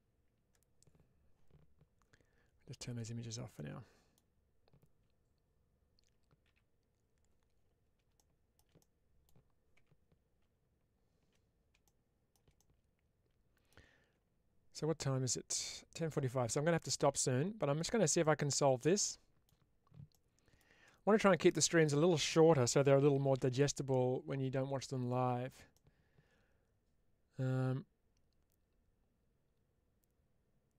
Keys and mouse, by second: 2.7 click, 3.4 middle click, 6.3 KP_Divide, 8.0 shift+middle click, 8.6 middle click, 11.2 Tab, 12.4-13.5 middle drag, 18.1-19.3 middle drag, 20.0 middle click, 21.6 click, 24.9 click, 25.6-30.7 middle drag.